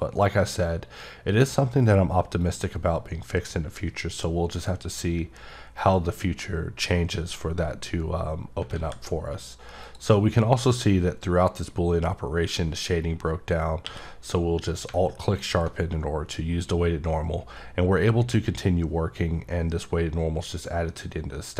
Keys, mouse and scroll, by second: 2.4 click, 4.9 scroll down 1, 9.8 click, 15.3 click.